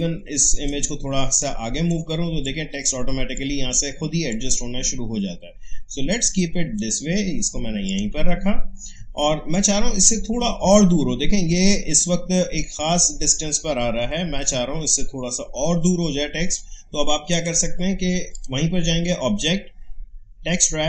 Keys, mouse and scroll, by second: 11.6 alt+scroll up 1, 17.3 click.